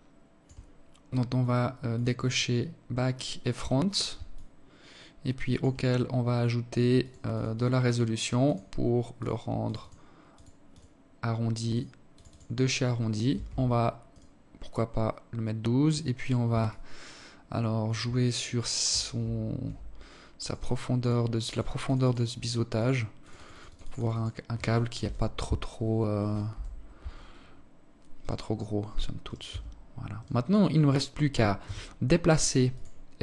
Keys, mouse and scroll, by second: 0.5 click, 0.9 click, 1.7 click, 2.9 alt+click, 5.6 click, 5.9 click, 6.5 click, 7.0 click, 7.7 click, 8.2 click, 8.4 click, 8.9 click, 9.3 click, 10.3 click, 10.7 click, 10.9 click, 11.9 Tab, 12.7 right click, 13.6-13.9 scroll down 4, 13.9 scroll up 1, 15.3 alt+click, 19.0 click, 19.6 click, 20.1 click, 20.4 click, 20.6 click, 20.9 click, 21.3 click, 21.8 click, 22.1 click, 22.3 click, 22.4 click, 22.5 click, 22.7 click, 23.5 KP_7, 25.0 KP_7, 26.7 right click, 27.8 right click, 28.1 Tab, 28.7 right click, 30.2 g, 32.2 r.